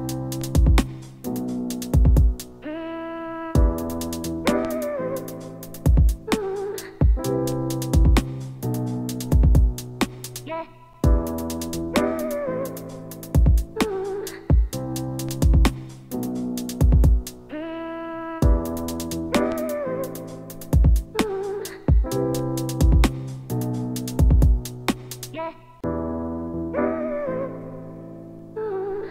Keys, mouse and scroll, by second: 1.0 shift+Left, 1.3 space, 4.5-5.7 drag, 4.5 space, 6.4 click, 7.2-11.2 shift+drag, 10.6 shift+Left, 10.8 shift+Left, 10.8-11.9 typing, 11.7 click, 12.6 shift+click, 12.8 click, 14.2 shift+Left, 14.3 space, 17.4 space, 19.8 click, 20.7 click, 22.8 shift+Down, 23.0 shift+Left, 23.9 ctrl+Tab, 25.4-26.9 drag, 27.3 click.